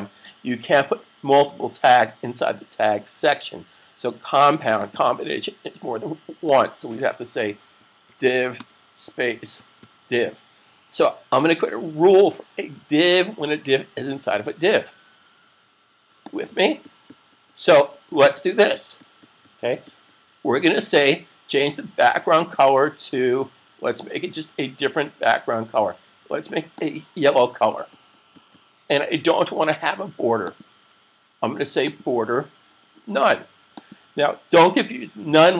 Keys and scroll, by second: 7.5-8.0 typing, 9.2-9.7 typing.